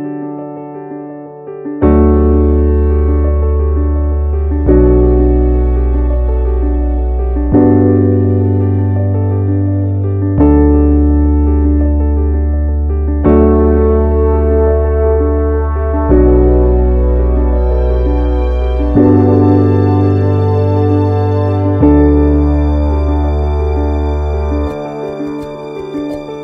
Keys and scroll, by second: 15.9 ctrl+z.